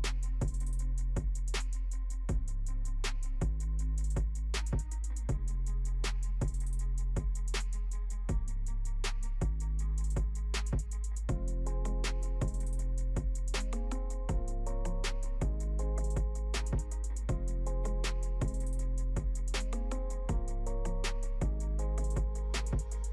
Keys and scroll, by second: 2.7 ctrl+v, 8.4 ctrl+t.